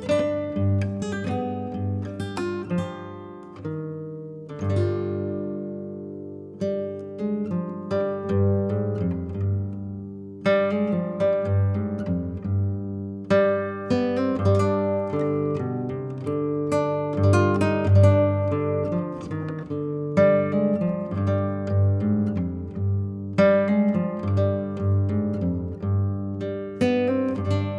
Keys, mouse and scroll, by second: 0.3 click, 0.4 middle click, 0.5 click, 0.5 middle click, 0.8-1.3 scroll up 1, 1.3 click, 1.9 middle click, 2.0-2.6 scroll up 4, 2.6-3.7 drag, 3.7 scroll up 2, 3.8-5.0 drag, 5.5 click, 6.4 scroll down 1, 6.5 middle click, 7.3 click, 8.0 click, 8.3 ctrl+z, 8.6-9.8 drag, 9.8 f, 10.0 click, 10.8 scroll up 4, 11.0 middle click, 11.5 click, 11.7 middle click, 12.1 scroll up 2, 12.3 click, 12.5 click, 12.8-16.9 typing, 14.3 ctrl+z, 15.7 scroll up 2, 15.8 shift+middle click, 17.3 middle click, 17.4 scroll down 6, 17.5 click, 17.9 click, 18.0 click, 18.0 click, 18.2 scroll up 5, 18.3 click, 18.5 g, 20.4 scroll down 5, 20.5 click, 20.6-22.3 middle drag, 22.3 KP_0, 22.8 click, 22.9 click, 23.0 middle click, 23.6 s, 24.2 click, 24.3 middle click, 25.3 click, 25.8 Tab, 26.0 click, 26.9 x, 27.1 middle click, 27.5 click.